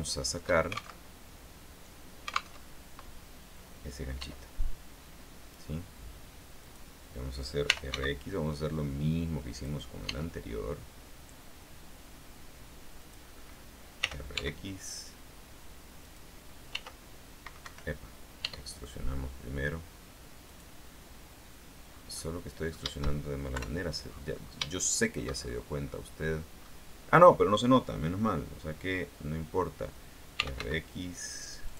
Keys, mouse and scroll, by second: 1.1 alt+shift+Tab, 2.7 alt+Tab, 4.3 e, 6.7 click, 7.6-8.6 typing, 9.7 click, 10.2 e, 13.1 click, 14.1 r, 14.5 x, 16.2 click, 16.9 r, 17.7 Escape, 18.5 e, 20.6 click, 22.1 scroll down 1, 22.3 middle click, 23.7 KP_3, 24.2-24.9 scroll down 2, 24.9 shift+middle click, 25.6-26.2 shift+scroll up 1, 26.7-27.1 scroll up 1, 30.3-31.2 typing.